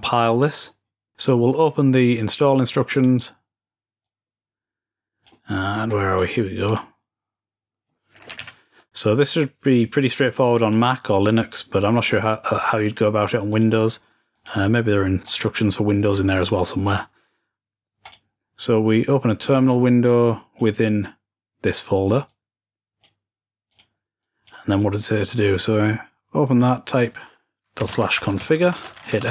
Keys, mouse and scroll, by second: 2.8 click, 3.4-5.4 drag, 5.4-6.5 scroll down 2, 6.5 click, 8.2 super+Right, 9.1 click, 10.4 click, 13.3-14.7 drag, 14.7-15.6 scroll down 1, 15.6 scroll down 1, 15.8-16.7 scroll up 1, 16.7-18.7 drag, 19.9-21.4 drag, 22.1-29.3 drag.